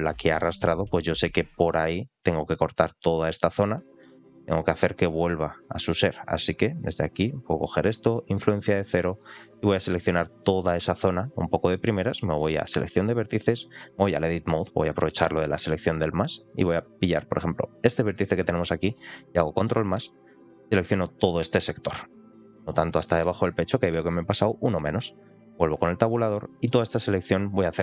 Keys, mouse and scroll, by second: 0.6 shift+middle click, 1.0 scroll up 1, 1.4 shift+middle click, 2.8-5.5 drag, 6.6 click, 7.1 click, 8.0 click, 9.1-10.6 middle drag, 12.0 click, 12.9 middle click, 14.2 Tab, 14.7 shift+middle click, 16.2 ctrl+click, 17.2 ctrl+click, 17.8 click, 18.5 middle click, 19.4 ctrl+KP_Add, 19.6 ctrl+KP_Add, 22.1 ctrl+KP_Subtract, 23.1 ctrl+KP_Add, 23.8 ctrl+KP_Subtract, 25.4 Tab, 26.0 middle click.